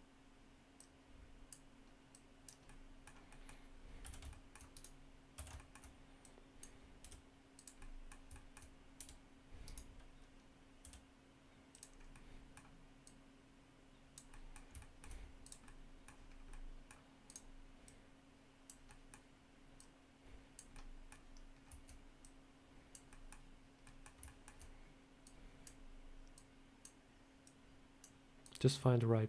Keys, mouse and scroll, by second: 0.6 click, 2.0 click, 2.5 middle click, 3.1 middle click, 3.9 s, 5.2 a, 5.4 shift+middle click, 5.4 shift+middle click, 6.1 click, 6.9 r, 7.7 middle click, 8.2 shift+middle click, 8.8 r, 10.7 s, 11.8 scroll up 2, 12.0 middle click, 12.9 click, 14.2 middle click, 14.6 shift+middle click, 15.3 click, 15.5 middle click, 16.1 scroll down 2, 16.4 middle click, 17.1 click, 17.7 click, 18.7 middle click, 19.6 click, 20.6 middle click, 21.4 scroll down 1, 22.1 click, 23.0 middle click, 23.7 middle click, 24.1 shift+middle click, 24.1 shift+middle click, 25.1 click, 26.2 click, 27.3 click, 28.3 click.